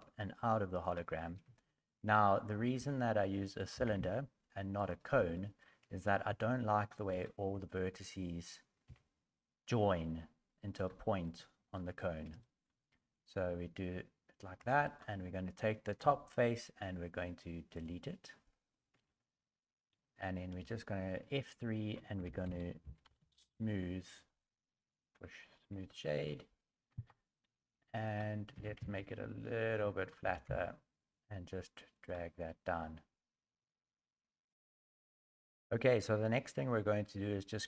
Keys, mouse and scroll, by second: 1.5 shift+middle click, 2.7 s, 3.7 g, 5.3 shift+middle click, 5.8-6.3 scroll up 3, 6.3 Tab, 7.1 alt+right click, 8.8 s, 11.2 middle click, 12.4 shift+middle click, 14.6 3, 14.8 right click, 16.0 Delete, 18.9 Tab, 19.1 middle click, 20.6 F3, 23.2 o, 25.9 middle click, 26.9 KP_1, 28.0 right click, 28.5 s, 30.2 g.